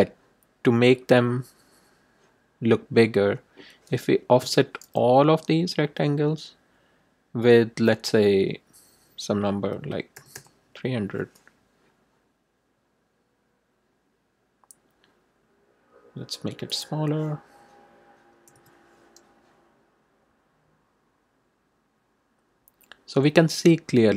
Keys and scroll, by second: 4.4 shift+=, 9.7 3, 10.1 0, 18.2 BackSpace, 18.5 1.